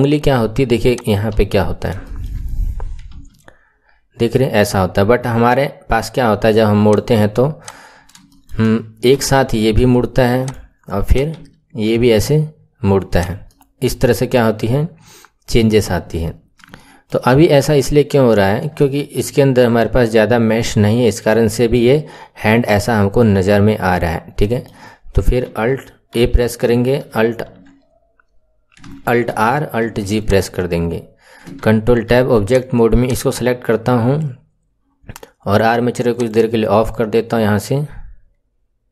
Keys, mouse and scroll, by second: 0.9 click, 1.3 KP_1, 1.6-1.9 scroll down 1, 2.0-3.1 shift+middle drag, 3.1 r, 7.6 drag, 7.9-8.3 scroll up 4, 8.3 shift+middle click, 9.1 r, 11.1 click, 11.3 r, 13.5-15.8 middle drag, 15.8 KP_1, 16.3-16.7 scroll up 5, 16.7-18.4 shift+middle drag, 18.4 scroll down 1, 18.7-20.9 shift+middle drag, 20.9-21.4 scroll down 1, 21.4-24.1 shift+middle drag, 24.1-24.4 scroll down 1, 24.4-25.4 shift+middle drag, 25.4 a, 26.1 a, 27.0 alt+e, 29.4 alt+r, 29.9 alt+g, 30.1 click, 31.5 ctrl+Tab, 32.4 click, 32.9 click, 36.1 click.